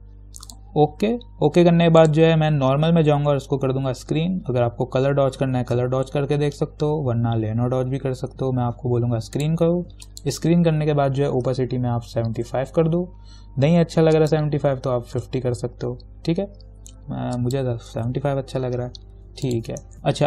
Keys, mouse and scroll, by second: 0.7 click, 9.6 click, 12.3-13.1 typing, 14.3 click, 15.0-15.9 typing, 17.6 click, 17.9-18.7 typing, 19.7 click, 19.9 ctrl+-.